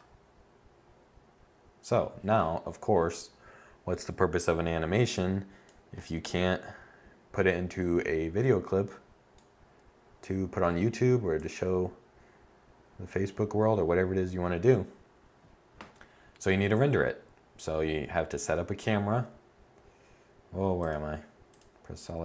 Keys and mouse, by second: 18.1 0.